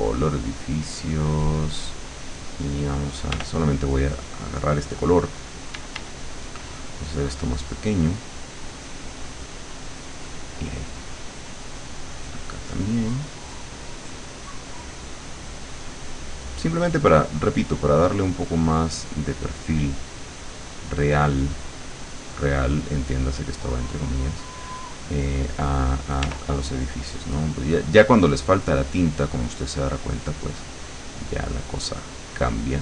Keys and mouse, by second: 0.1 click, 1.5 click, 3.3 r, 5.7 d, 6.7 click, 7.1 click, 8.5 click, 11.9 click, 12.3 click, 12.7 click, 13.1 click, 14.1 click, 16.1 click, 17.0 click, 20.4 click, 26.3 r, 26.8 click, 27.4-30.5 drag, 31.0-32.8 drag.